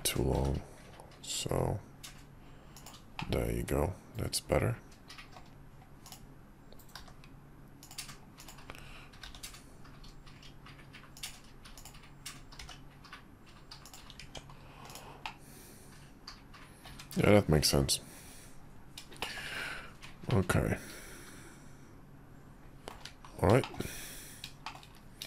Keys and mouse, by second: 0.3 g, 3.2-5.4 middle drag, 7.0 g, 9.2 g, 11.8 click, 12.6 g, 14.2 Tab, 14.9-16.8 middle drag, 16.9 `, 19.2 shift+middle click, 20.3-22.9 middle drag, 23.6 shift+middle click, 24.6 shift+middle click.